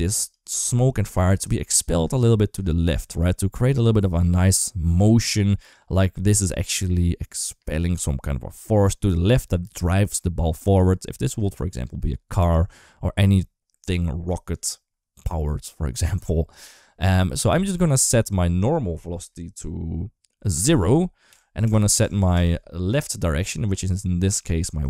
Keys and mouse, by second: 0.3-1.2 d, 1.2-3.0 drag, 3.8 d, 3.9-5.5 right drag, 5.5 d, 5.8 d, 6.2-8.9 drag, 8.9 d, 9.3 d, 9.6-11.7 drag, 12.2 d, 12.3-14.3 right drag, 14.3 d, 18.4-24.2 drag, 22.2 Tab, 24.4 d, 24.6 click.